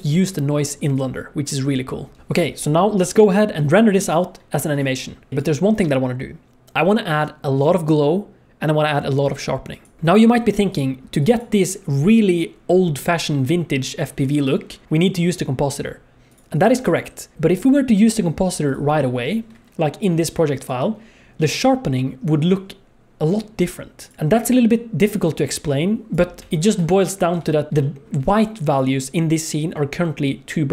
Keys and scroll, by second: 10.0 ctrl+s.